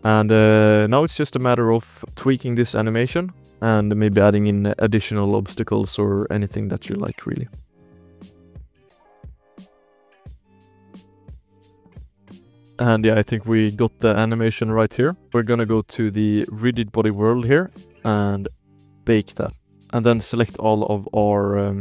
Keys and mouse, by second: 0.0 ctrl+s, 0.0 space, 0.6 click, 1.2 KP_Decimal, 1.9-2.4 drag, 2.4 alt+a, 2.4 ctrl+s, 2.6 shift+drag, 3.3 drag, 3.7 shift+click, 4.6 shift+drag, 5.8 shift+middle drag, 6.6 space, 6.8 ctrl+s, 7.6-8.9 shift+middle drag, 9.2 shift+middle drag, 10.2-10.9 shift+drag, 11.0-11.8 shift+drag, 11.9-12.2 shift+drag, 14.9 shift+drag, 15.3 ctrl+s, 15.3 space, 15.7 ctrl+s, 16.0 shift+drag, 16.7 click, 17.0 click, 19.0 click, 19.8 ctrl+s, 20.2 click, 20.8 KP_Decimal, 21.4 alt+a, 21.7 click.